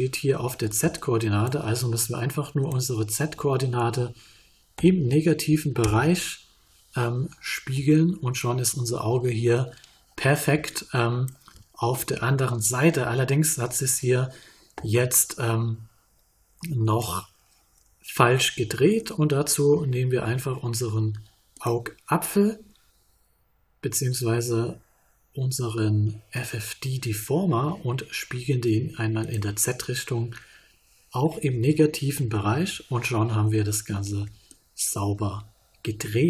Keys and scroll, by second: 4.7 _, 5.8 Return, 31.7 _, 32.1 Return.